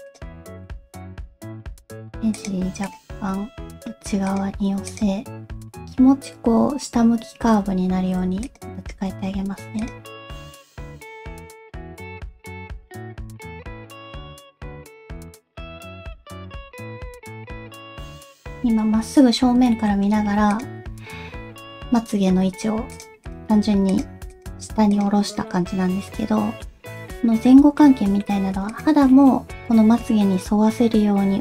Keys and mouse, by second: 0.0 click, 0.4 alt+z, 1.1 g, 2.8 click, 3.1 g, 4.9 click, 8.4 click, 8.9 g, 10.1 r, 10.7 g, 11.5 g, 12.2 click, 12.5 alt+z, 12.5 alt+click, 12.6-18.0 typing, 13.0 click, 13.5 click, 14.3 click, 15.0 click, 15.4 click, 17.0 click, 17.5 click, 19.7 shift+middle click, 20.5 click, 21.4 g, 23.2 click, 23.5 g, 24.3 click, 25.6-26.7 middle drag, 27.0 middle click, 27.8 middle click, 28.7 click, 29.1 middle click, 30.2-31.4 middle drag.